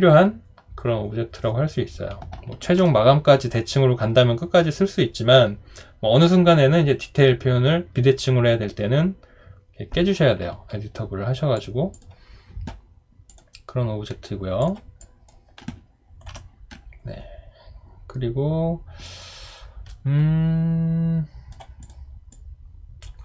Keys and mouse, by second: 16.3 Delete.